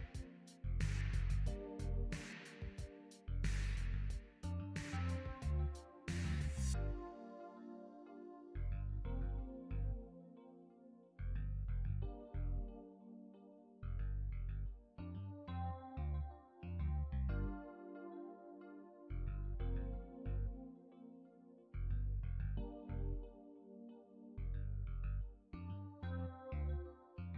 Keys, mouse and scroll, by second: 11.3 click, 12.4 click, 13.5 click, 15.0 click, 16.3-17.7 scroll down 5, 17.7 click, 18.9 click, 21.4-21.8 scroll down 3, 21.8 scroll up 2, 23.5 x, 25.8 click.